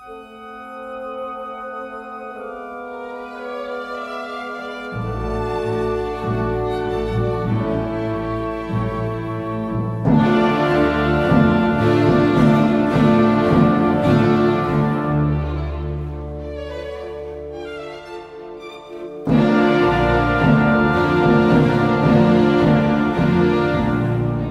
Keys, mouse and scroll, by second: 0.8 alt+scroll up 1, 11.4-11.9 alt+scroll up 1.